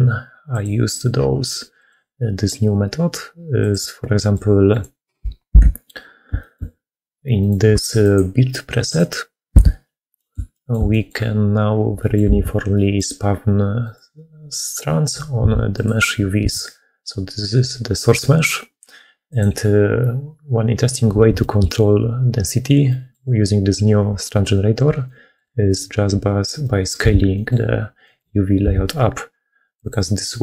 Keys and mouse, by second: 4.0 click, 4.6 click, 5.4 KP_Decimal, 6.3 shift+middle click, 7.6 g, 9.4 KP_Decimal, 10.0 middle click, 10.4 shift+middle click, 10.8 middle click, 11.8 middle click, 12.3 alt+a, 12.6 middle click, 13.7 click, 14.5 click, 16.3 a, 21.3 shift+middle click, 22.7 middle click, 24.9 middle click, 25.5 click, 26.5 middle click, 26.9 a, 27.2 click, 27.9 middle click, 28.7 s.